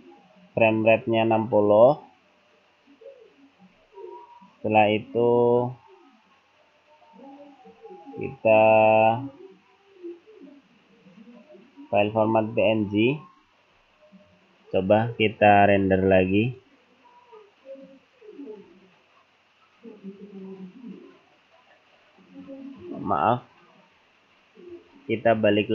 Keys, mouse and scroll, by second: 3.7 scroll up 1, 6.6-7.2 scroll down 2, 12.9-13.7 scroll down 5, 13.8-14.6 scroll up 12, 15.9 click.